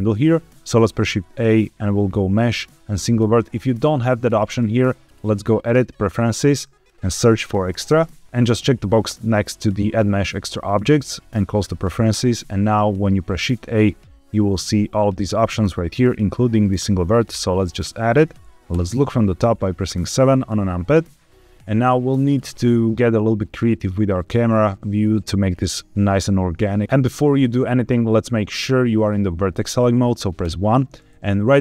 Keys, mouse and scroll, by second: 0.5 shift+a, 0.8 shift+a, 4.4-5.7 drag, 12.7 shift+a, 18.6 KP_7, 26.8 ctrl+z, 26.8 1, 30.4 1.